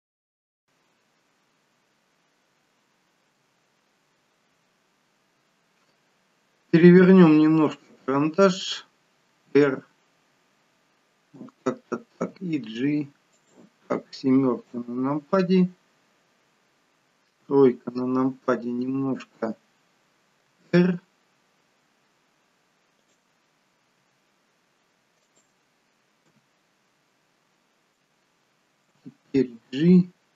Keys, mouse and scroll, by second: 3.5 KP_1, 4.9-5.9 scroll down 5, 9.4 r, 12.3 g, 14.8 KP_7, 17.5 KP_3, 20.8 r, 24.1 g, 26.4 KP_7, 29.0 g.